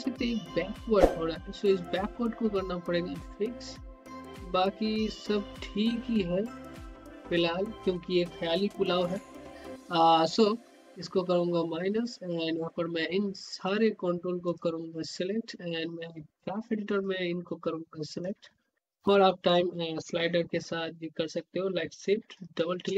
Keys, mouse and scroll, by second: 10.6 click, 11.9-12.3 scroll down 1, 12.6-14.4 drag, 14.9-15.2 scroll up 1, 15.2 scroll down 1, 17.0-22.3 drag.